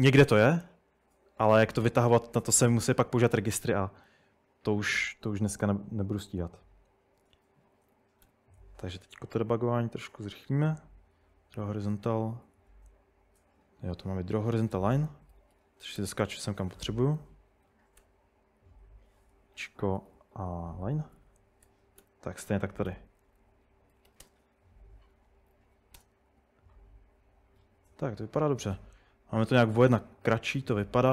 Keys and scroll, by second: 3.3 Up, 3.6 Return, 7.7-8.7 typing, 12.2-13.9 typing, 15.1-16.5 typing, 18.0 typing, 19.3-26.0 typing.